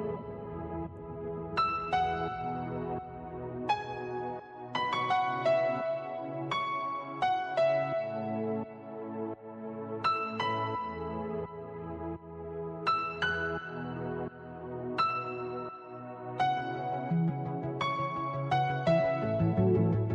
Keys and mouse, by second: 0.2 click, 3.3 click, 10.8 click, 14.4 click, 15.6 click, 15.6 space, 17.2 click, 17.6 click, 18.2 click, 18.2 space.